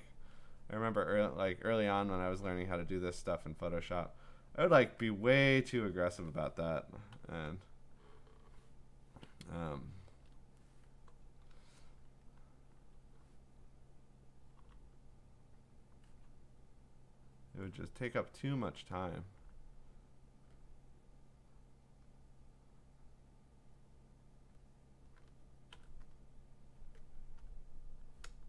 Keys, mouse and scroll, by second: 0.1 click, 1.6 click, 1.7 click, 2.2 click, 4.0 click, 4.8 click, 6.1 click, 7.1 g, 7.6 click, 10.1 ctrl+z, 14.6 b, 15.7 click, 17.5 click, 18.6 click, 19.2 click, 22.0 click, 23.1 click, 24.5 click, 25.7 g, 26.1 click, 27.5 click, 28.3 b.